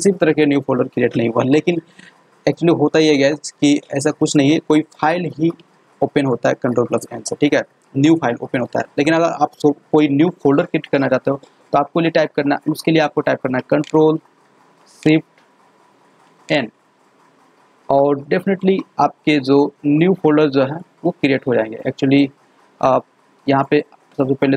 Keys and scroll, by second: 16.4 ctrl+shift+n.